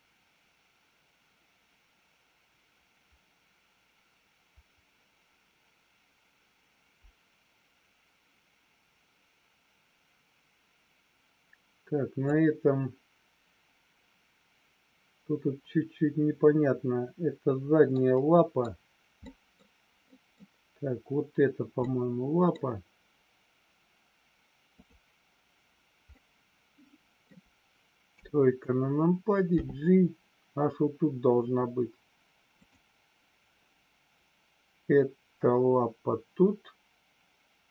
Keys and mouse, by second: 18.0-18.5 middle drag, 19.2 middle click, 20.0-20.3 middle drag, 21.7-22.3 middle drag, 26.1-27.2 middle drag, 28.0 KP_3, 29.6 g, 32.5 click.